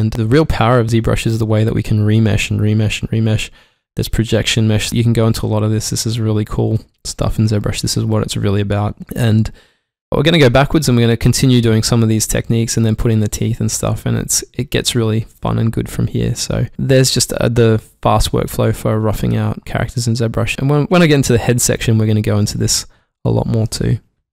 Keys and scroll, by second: 20.6 shift+Num_Lock.